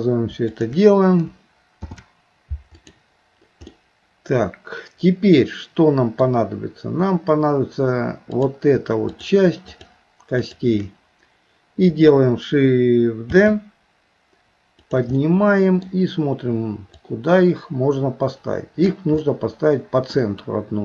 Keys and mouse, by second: 0.5 click, 1.8 ctrl+p, 3.7-6.3 middle drag, 8.3 click, 9.7 shift+click, 10.5 shift+click, 13.3 shift+d, 15.2 middle click, 17.0-18.9 drag, 19.3 middle click.